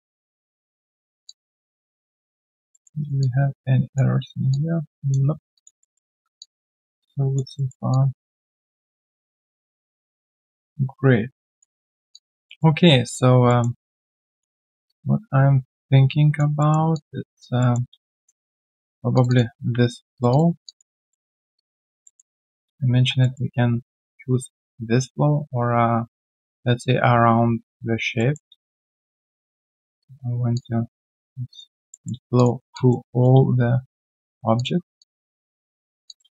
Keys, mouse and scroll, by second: 0.0 right click, 0.5 3, 1.2 alt+click, 1.6-2.0 alt+scroll down 1, 2.0 alt+click, 2.5 alt+right click, 2.7 alt+middle click, 3.0 alt+right click, 3.2 alt+click, 4.1 alt+right click, 4.5 alt+click, 5.3 alt+scroll down 1, 5.5 alt+click, 5.8 alt+middle click, 6.3 alt+click, 7.5 alt+middle click, 7.9 alt+click, 11.8 alt+scroll down 1, 12.4 alt+middle click, 12.7 alt+right click, 13.0 alt+click, 13.4 alt+middle click, 13.8 alt+right click, 14.2 alt+click, 14.6 alt+middle click, 14.8 alt+click, 16.6 alt+middle click, 16.9 alt+click, 17.6 alt+middle click, 17.9 q, 18.5 right click, 19.2 double click, 20.1 shift+click, 20.6 alt+click, 21.5 alt+middle click, 21.5 shift+click, 21.7 shift+double click, 22.0 alt+middle click, 23.2 alt+middle click, 23.2 click, 28.1 alt+middle click, 29.0 shift+click, 31.9 alt+middle click, 32.3 shift+click, 32.7 alt+click, 33.8 shift+click, 34.9 alt+click, 35.8 alt+click, 36.0 alt+click.